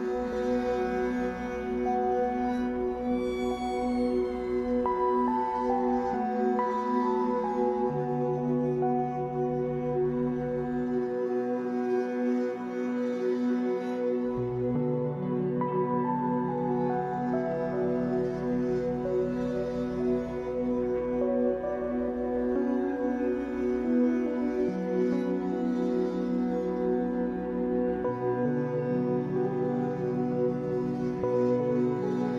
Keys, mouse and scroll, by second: 0.3 click, 0.7 scroll down 1, 0.9-7.3 middle drag, 1.5 Tab, 3.2 scroll up 1, 4.1 scroll up 1, 4.8 Tab, 6.0-6.3 scroll up 2, 6.8-7.3 scroll up 2, 7.3-9.5 drag, 9.5-12.1 middle drag, 11.0 z, 12.1 click, 12.8 KP_1, 14.5 e, 15.8 click, 16.0 middle click, 16.7 shift+click, 17.0-18.1 middle drag, 17.8 f, 18.1-19.9 drag, 19.9 f, 20.3-24.1 middle drag, 21.8 scroll down 2, 22.8 ctrl+r, 24.1 click, 24.7 KP_1, 25.3-26.4 shift+middle drag, 25.5-26.4 scroll up 2, 26.4 click, 27.1 alt+a, 28.2 b, 30.1 click, 30.9 alt+a.